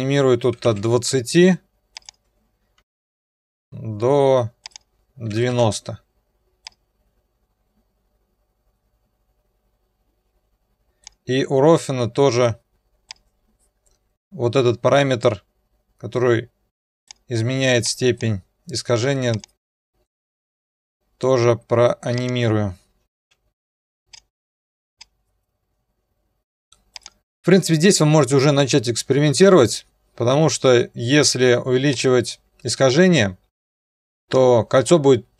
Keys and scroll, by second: 0.2-1.1 typing, 5.1-5.9 typing, 20.3-21.1 typing, 23.3 u, 24.4 Return, 24.4 0.